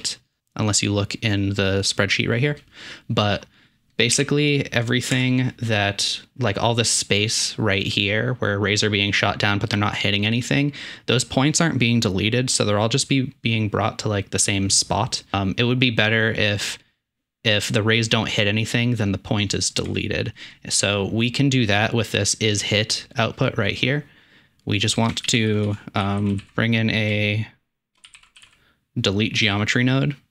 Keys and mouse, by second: 4.1 KP_7, 5.2 Tab, 19.9 Tab, 25.3 shift+a, 25.7 s.